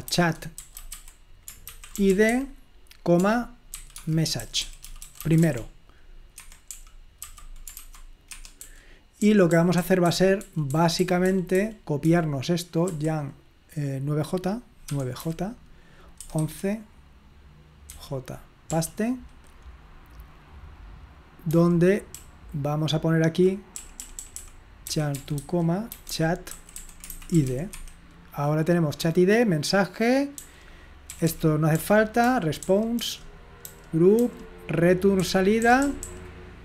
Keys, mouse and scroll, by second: 0.0-12.9 typing, 6.4 Escape, 8.3 Escape, 14.9 9, 16.2 typing, 17.9-18.7 typing, 21.6 typing, 22.7-27.6 typing, 27.8 Escape, 30.4-36.0 typing.